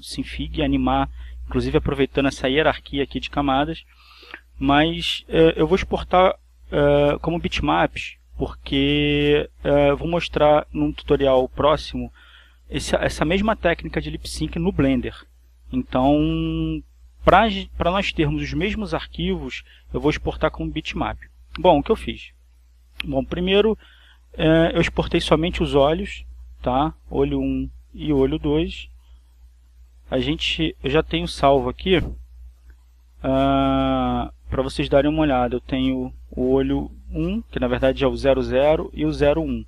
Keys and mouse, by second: 2.1 click, 3.3-4.3 drag, 24.5-25.5 drag, 26.2 click, 27.4 click, 28.5-29.7 drag, 29.7 click, 29.7 middle click, 30.9 click, 34.3 click, 37.0 click, 39.2 click.